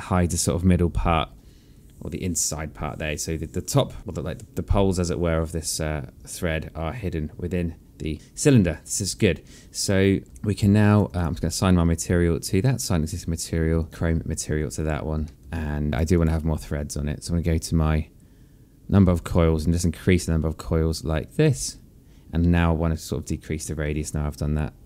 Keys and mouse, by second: 9.4 alt+click, 11.4 alt+click, 12.4 right click, 13.9 alt+middle click, 15.5 alt+middle click, 16.3 right click, 16.8 click, 20.0 click, 23.2 click.